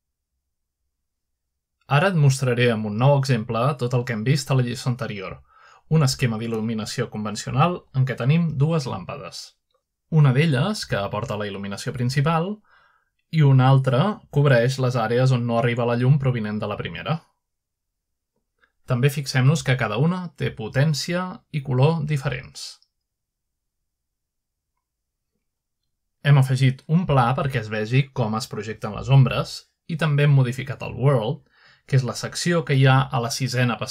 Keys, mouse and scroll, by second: 2.0 shift+middle click, 3.0 middle click, 5.6 middle click, 6.9 middle click, 8.1 z, 9.1 z, 9.9-12.1 shift+middle drag, 12.1 click, 14.3 click, 17.9 z, 20.1 g, 21.5 click, 23.9 click, 24.3 click, 26.0-26.8 drag, 28.1 g, 30.1 click, 30.5-31.5 middle drag, 31.1 g, 32.0 click, 32.9 click, 33.3 g, 33.8 click.